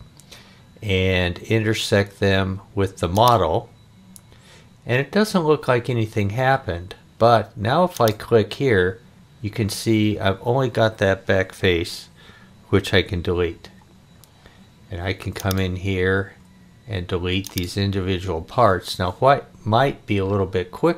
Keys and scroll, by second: 13.5 Delete, 16.2 Delete.